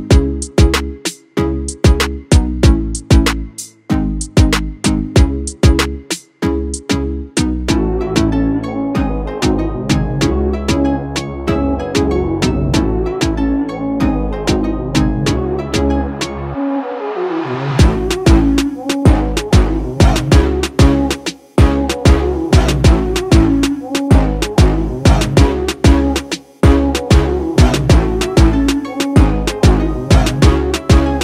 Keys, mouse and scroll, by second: 2.2 click, 5.9 click, 12.1 click, 14.5-25.3 drag, 25.3 ctrl+t, 26.7-31.2 alt+drag.